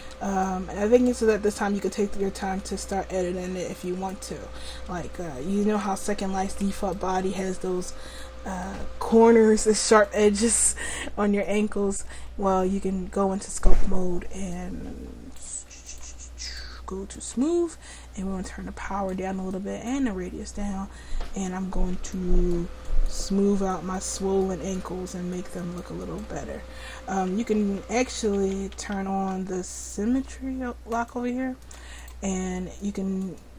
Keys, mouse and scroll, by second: 4.0-5.3 right drag, 5.3 Tab, 5.8 Tab, 11.6-12.7 drag, 12.8 middle click, 14.5-21.4 drag, 22.8 click, 22.9-24.0 middle drag, 24.0-27.7 drag, 24.5-26.4 middle drag, 24.5-26.4 right drag, 27.7 ctrl+z, 28.1 ctrl+z, 28.5 ctrl+z, 28.8 ctrl+z, 30.9-33.5 drag.